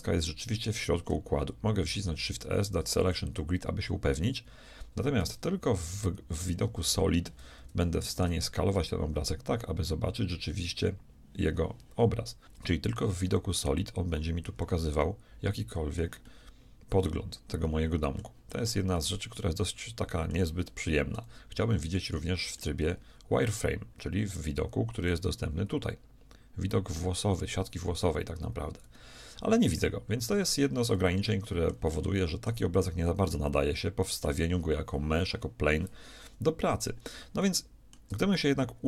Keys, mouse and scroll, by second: 1.7 shift+s, 5.2 Tab, 5.9 z, 6.5-12.1 middle drag, 6.8 Tab, 12.4-18.2 middle drag, 18.5-22.1 middle drag, 22.1 z, 22.6-24.6 middle drag, 25.1-27.0 drag, 30.4 z, 31.0-33.0 drag, 33.0-35.4 middle drag, 36.3 KP_1.